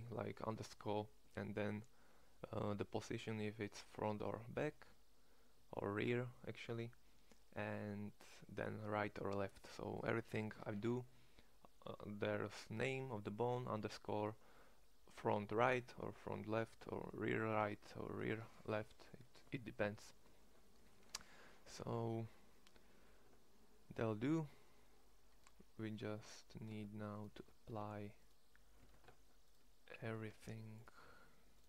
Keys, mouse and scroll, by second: 24.6-26.7 middle drag, 26.7 ctrl+Tab, 28.7 ctrl+Tab, 30.2 ctrl+a.